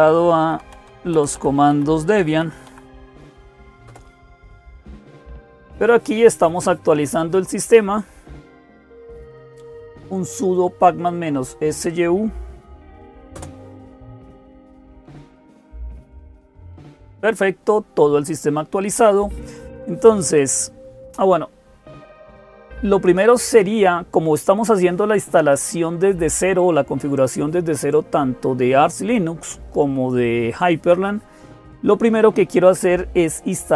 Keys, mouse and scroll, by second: 0.0-33.7 typing, 3.6 Return, 13.1 Return.